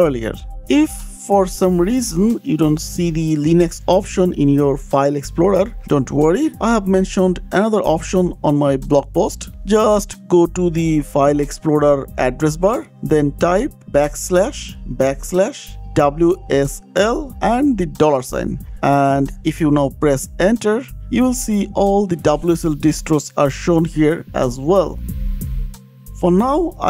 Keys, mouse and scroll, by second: 0.5 Escape, 0.5 click, 6.6 click, 8.5 ctrl+c, 9.5 click, 12.1 click, 15.0 click, 16.6 ctrl+v, 17.8 KP_Enter, 18.6 Return, 18.6 shift+4, 19.4 Return, 21.7 click, 22.2 click, 23.8 click, 24.2 click, 25.2 click, 25.5 click.